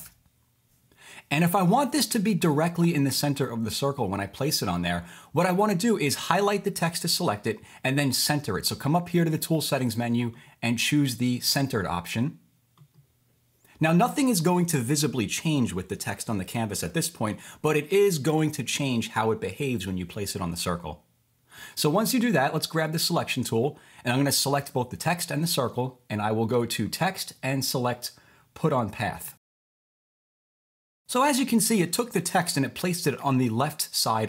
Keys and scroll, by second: 0.0-0.6 typing, 13.2-13.9 typing, 29.5-30.7 typing.